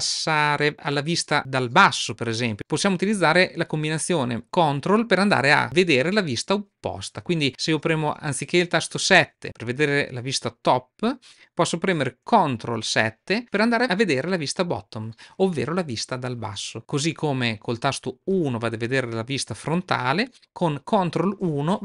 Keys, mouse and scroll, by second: 8.9 KP_7, 12.8 ctrl+KP_7, 18.2 KP_1, 21.3 ctrl+KP_1.